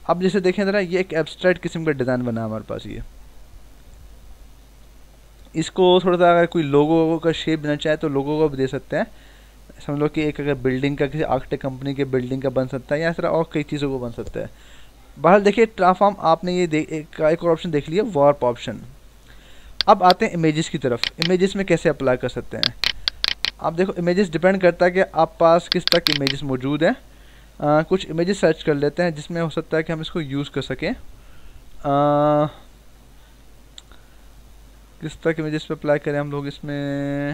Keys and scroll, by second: 0.9 ctrl+-, 1.8 ctrl+=.